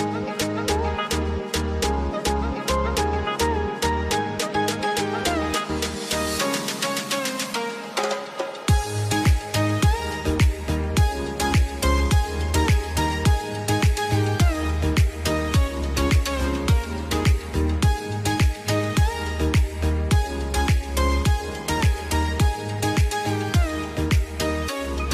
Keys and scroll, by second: 4.4 F2, 6.7 F3, 8.0 r, 8.4 F2, 15.8 ctrl+z, 18.4 t, 18.9 F2, 21.8 F3.